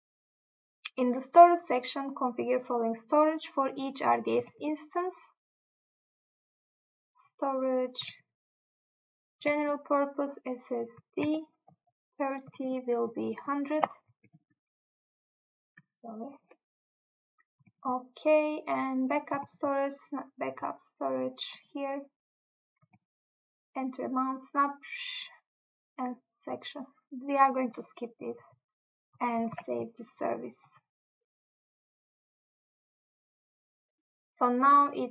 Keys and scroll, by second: 4.5 Tab, 8.1 Tab, 9.5 Tab, 11.3 Tab, 12.6 Tab, 17.7 Tab, 19.5 Tab, 23.0 Tab.